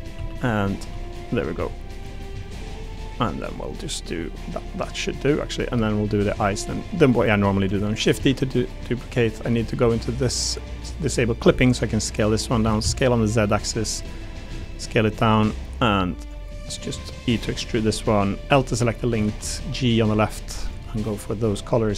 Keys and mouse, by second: 0.1 1, 0.7 middle click, 0.8 click, 1.6 click, 1.6 g, 2.0 3, 2.4 click, 2.9 click, 3.5 click, 3.7-4.7 middle drag, 4.9 middle click, 5.8 shift+middle click, 6.2 3, 6.7 middle click, 7.7 shift+d, 8.1 s, 11.0 click, 11.4 s, 12.6 s, 12.8 z, 13.4 click, 13.7 click, 14.4 s, 15.5 click, 16.7 click, 17.0 e, 18.6 l, 19.1 a, 19.4 g, 20.6 click, 21.8 g.